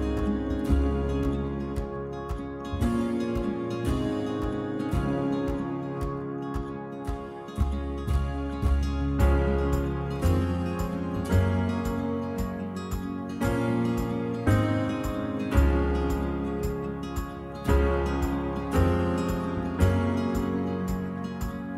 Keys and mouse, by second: 19.5 click.